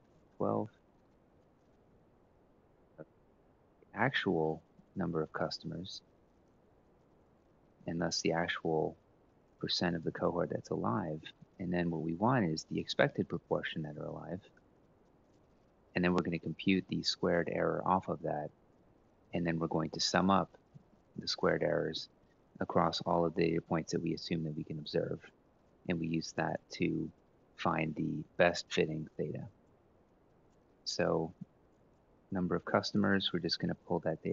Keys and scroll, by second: 0.0 Up, 0.2 Up, 0.4 Up, 5.0-7.1 typing, 8.9-10.9 typing, 12.2-15.0 typing, 16.2-16.9 typing, 18.2 Up, 18.6 Left, 19.0-21.1 typing, 21.6 Tab, 25.6-26.3 typing.